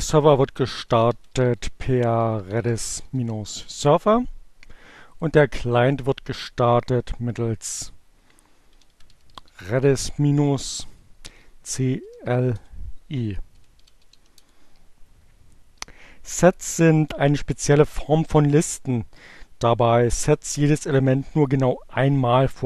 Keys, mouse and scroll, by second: 0.0-1.3 typing, 2.4-3.6 typing, 5.2 click, 7.6-11.2 typing, 12.7-13.7 typing, 14.2 Return.